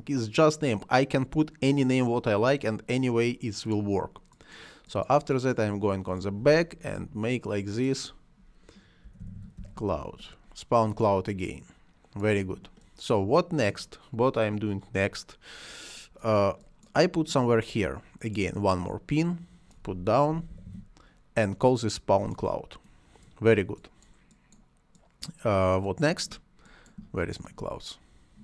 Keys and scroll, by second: 6.9 Delete, 8.8-10.0 typing, 20.0-21.1 typing.